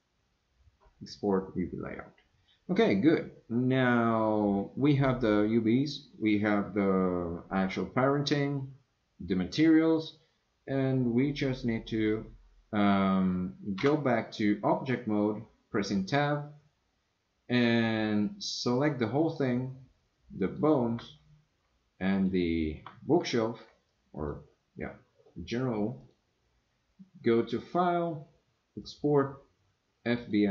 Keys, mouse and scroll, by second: 13.8 Tab, 18.7-19.3 middle drag, 20.4 click, 22.2 shift+click, 23.9-24.3 drag, 26.0-30.5 drag.